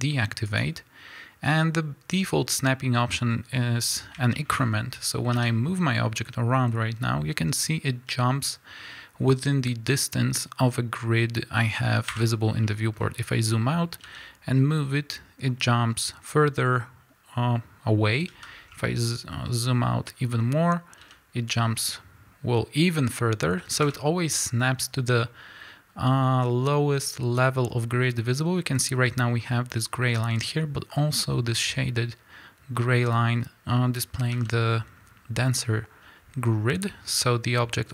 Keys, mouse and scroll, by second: 4.3 shift+middle click, 8.0 g, 12.2 Escape, 12.4 scroll down 1, 14.0 g, 18.4 Escape, 18.6 scroll down 1, 20.0-21.0 scroll up 1, 21.0 g, 23.9 Escape, 25.3-26.2 scroll up 1, 34.3 g.